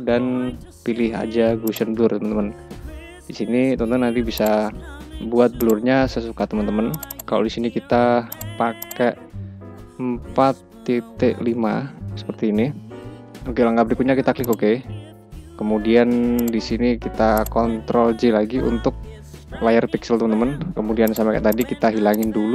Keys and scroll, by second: 18.0 ctrl+j.